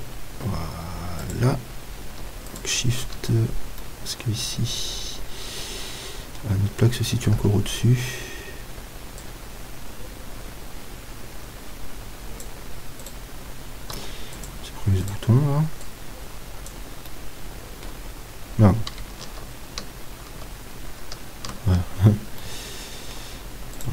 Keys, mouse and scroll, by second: 1.3-3.2 drag, 2.5-4.3 right drag, 4.0-5.7 middle drag, 7.4 KP_1, 9.2-13.0 drag, 13.0-16.8 right drag, 14.0 x, 15.9-18.1 drag, 17.1-19.6 middle drag, 19.6 ctrl+z, 22.4-23.8 middle drag, 23.8-23.9 right drag.